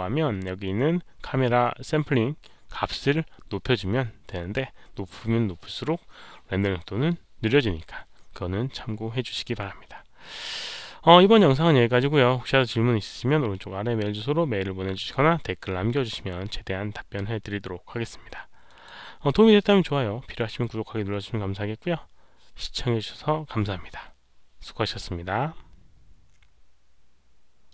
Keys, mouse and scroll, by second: 0.5 click, 4.4-5.1 scroll down 2, 18.6 click, 25.0 click, 27.6 click.